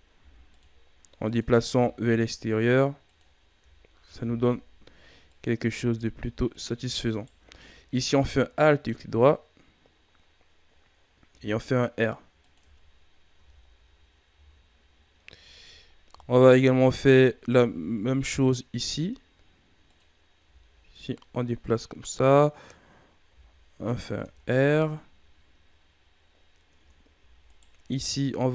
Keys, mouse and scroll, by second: 0.1 ctrl+r, 1.6 s, 4.0 ctrl+r, 5.6 s, 7.1 alt+right click, 11.3 r, 12.6 Tab, 12.9 scroll down 3, 13.3 a, 13.6-14.3 scroll down 1, 14.3-14.8 shift+scroll up 7, 15.3 Tab, 15.8-16.1 scroll up 1, 16.1 shift+scroll down 2, 16.5-17.4 scroll up 1, 17.4 ctrl+r, 20.3 s, 23.2 r, 24.1 Tab, 24.5-25.4 scroll down 8, 26.0-26.7 scroll up 8, 26.7 Tab, 27.4 alt+right click, 28.4 e.